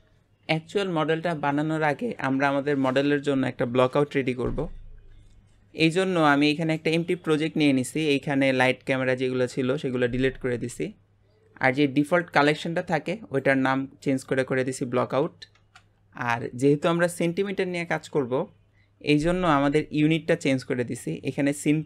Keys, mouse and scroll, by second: 5.8-8.9 middle drag.